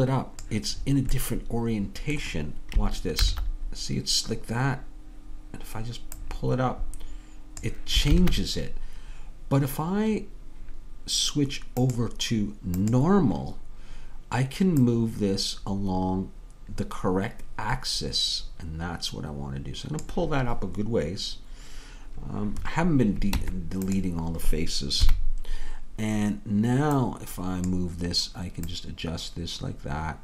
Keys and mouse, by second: 0.9-3.3 middle drag, 3.3 ctrl+z, 6.2-8.2 drag, 8.2 ctrl+z, 12.1-20.1 drag, 23.4 Tab, 25.1 KP_3, 27.1-28.5 drag.